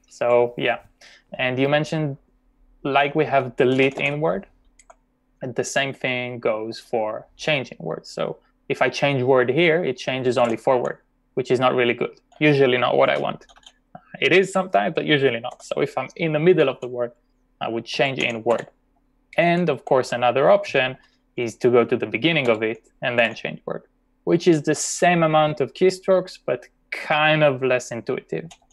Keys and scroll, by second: 2.8-4.8 typing, 6.5 typing, 10.4 c, 12.2-13.6 typing, 15.6 u, 17.7-23.7 typing, 28.5-28.7 typing.